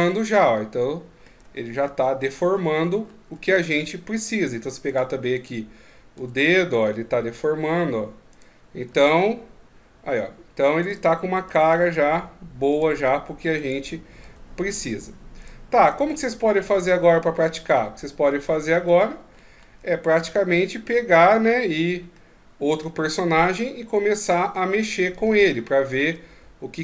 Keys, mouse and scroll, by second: 0.3 middle click, 1.5-2.0 shift+scroll up 2, 2.5 scroll up 3, 3.6-4.1 shift+scroll up 3, 4.9 right click, 6.2 r, 8.3 right click, 8.9 r, 10.9 right click, 11.5 r, 12.7 right click, 13.6 right click, 14.2 r, 15.4 right click, 15.9 right click, 16.6 r, 17.9 middle click, 18.8 ctrl+scroll up 1, 20.2 r, 22.1 middle click, 23.4 right click, 24.3 middle click, 25.5 shift+scroll up 1, 26.4-26.8 scroll up 4.